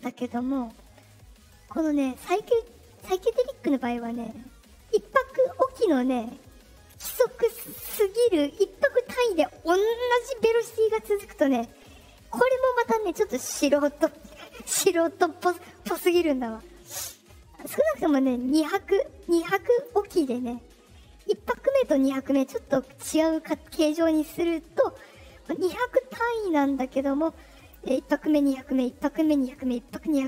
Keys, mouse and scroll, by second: 5.2 right click.